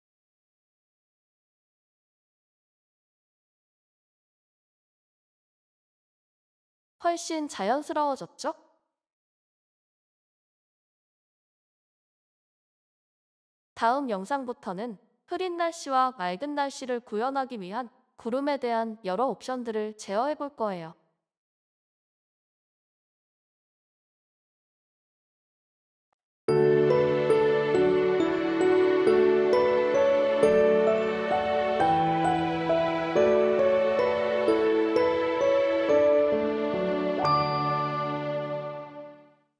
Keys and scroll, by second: 8.6-13.0 typing, 14.9-16.2 typing, 17.5 ctrl+a, 21.5-22.7 typing, 23.9-26.3 typing.